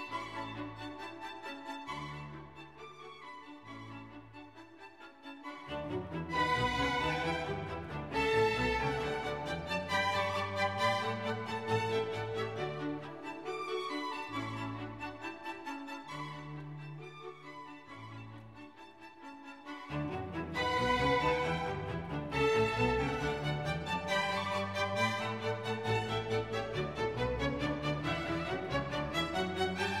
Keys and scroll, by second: 0.3 Return, 2.5 F1, 5.3 Escape, 11.8 Escape, 17.9 Escape, 23.7 F1, 26.9 Escape.